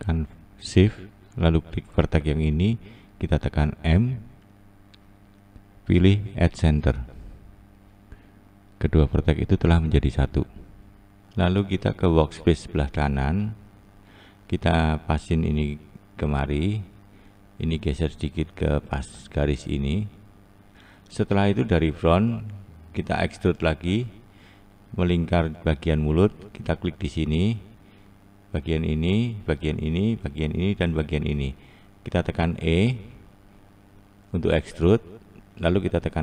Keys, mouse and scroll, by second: 1.8 shift+Left, 6.6 m, 7.7-8.5 scroll down 2, 12.4-14.2 scroll up 1, 14.2 click, 14.9 click, 16.2-16.7 scroll down 1, 17.1 click, 17.9 click, 21.4-22.0 scroll down 3, 22.7-23.6 scroll down 1, 23.6-25.2 scroll up 2, 25.3 2, 26.3 click, 29.2 shift+click, 29.9 shift+click, 30.5 shift+click, 31.7 e, 35.1 s.